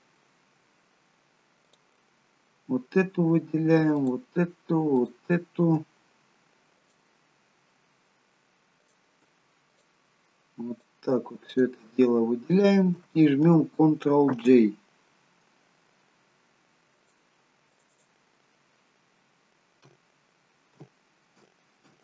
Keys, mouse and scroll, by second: 1.7 click, 4.1 shift+click, 6.9 click, 8.9 click, 9.8 shift+click, 10.8 shift+click, 12.2 shift+click, 14.4 ctrl+j, 17.0 click, 17.8 click, 18.0 click.